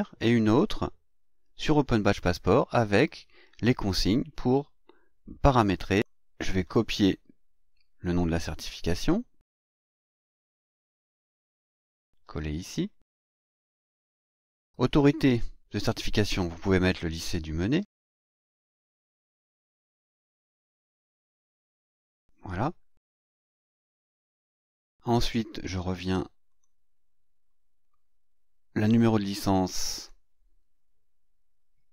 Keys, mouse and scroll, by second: 0.5 click, 1.6 click, 5.9 click, 6.6 click, 8.9 click, 10.3 click, 12.1 ctrl+v, 13.0 click, 13.3 ctrl+v, 14.4 click, 16.1-18.0 typing, 19.9-21.7 typing, 23.1 click, 25.7 click, 26.4 click, 29.9 click.